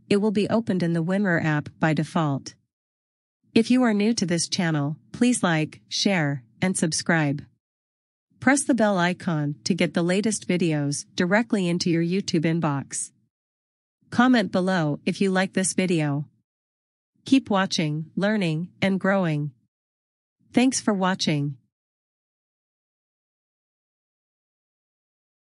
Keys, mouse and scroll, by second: 0.9 click, 4.3 click, 4.7 right click, 11.4 click, 15.8 click, 22.7 click.